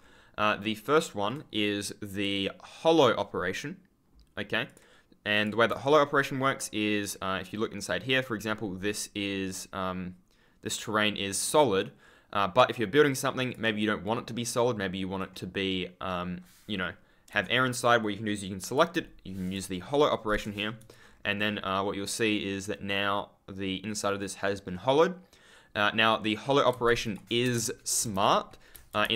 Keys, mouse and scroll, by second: 2.0 click, 4.6 click, 5.7 ctrl+click, 5.8-6.5 scroll down 1, 6.5-7.2 scroll up 1, 8.6 ctrl+click, 14.0 right click, 18.6 click, 20.2 Return, 20.8 ctrl+click, 20.9-22.2 scroll up 1, 25.9-26.4 scroll down 1, 26.6 ctrl+z, 27.4 shift+Menu, 27.5 ctrl+w, 27.9 e.